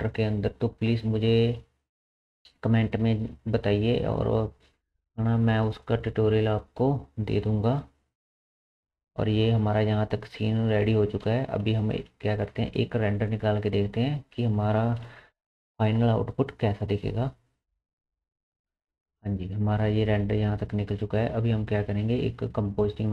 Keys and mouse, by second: 8.2 space, 11.1 space, 18.6 F11, 18.6-23.1 middle drag.